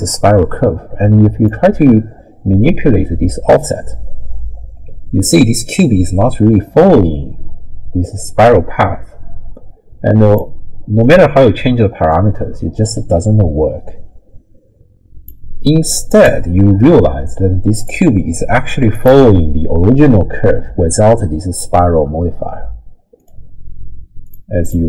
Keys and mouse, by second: 1.5-10.4 drag, 12.1-15.3 drag, 18.9 click, 23.2 click, 24.6 click.